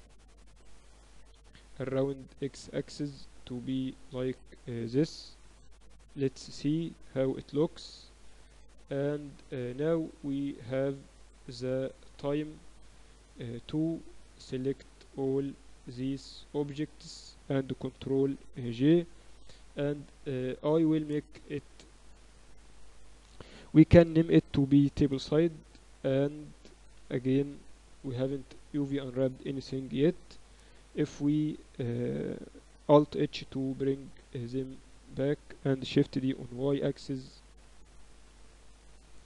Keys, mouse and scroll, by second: 1.2 r, 3.1-5.1 drag, 4.0 z, 5.3-11.0 typing, 12.2 KP_2, 12.4 KP_2, 14.2-18.9 right drag, 18.0 ctrl+j, 18.9 ctrl+Up, 20.3-21.9 drag, 26.3 ctrl+s, 27.1 KP_7, 27.5 z, 29.9 KP_7, 31.1 KP_Divide, 32.3 KP_Divide, 33.2 alt+h, 33.8 a, 35.1-36.1 right drag, 36.1 shift+d, 38.3 ctrl+s.